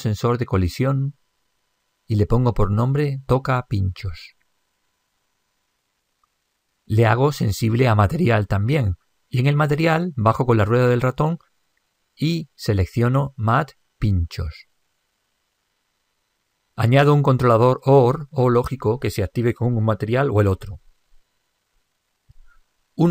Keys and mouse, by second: 0.0 click, 0.8 click, 6.9-8.6 middle drag, 8.0-11.4 drag, 16.4 click, 18.4 click, 20.6-23.1 drag.